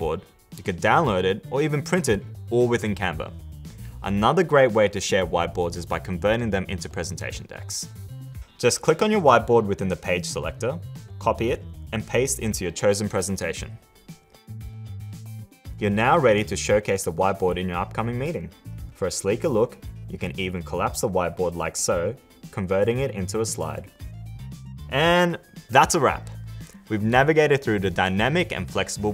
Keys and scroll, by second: 11.2 super+c, 14.6 super+v.